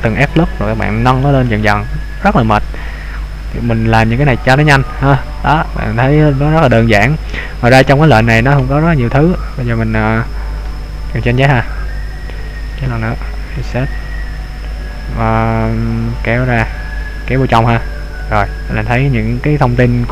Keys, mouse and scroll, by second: 5.2-5.6 scroll down 1, 5.6 middle click, 11.4 ctrl+z, 12.7 ctrl+z, 13.8 i, 18.2 click.